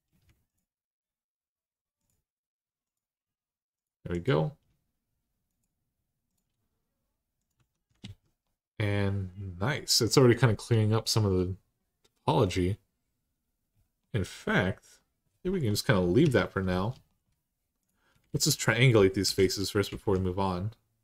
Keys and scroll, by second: 7.4 Tab, 7.8 alt+z, 16.0 Tab, 18.1 alt+z, 19.0 3, 19.8 alt+z.